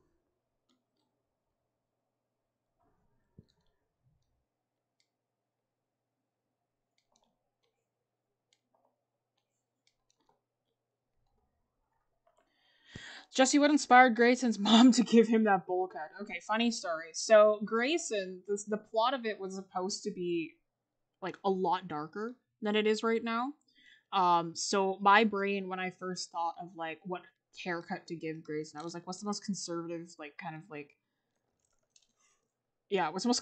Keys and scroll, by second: 7.1 ctrl+z.